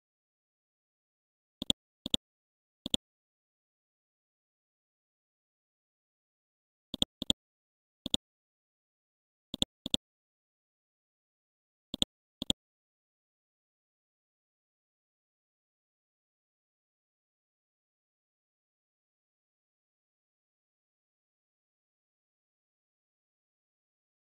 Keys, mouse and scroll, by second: 1.6 ctrl+click, 2.0 click, 2.9 ctrl+click, 4.7 scroll down 1, 5.7 scroll up 1, 6.9 click, 8.1 right click, 9.5 click, 10.5-11.9 scroll up 1, 11.9 click, 12.8-13.7 scroll up 1, 13.8-24.3 typing.